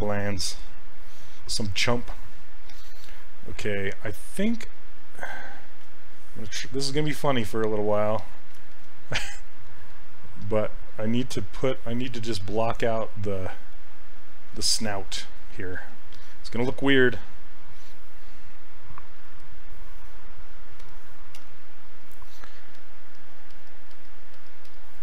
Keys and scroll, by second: 11.4 w, 21.4 s.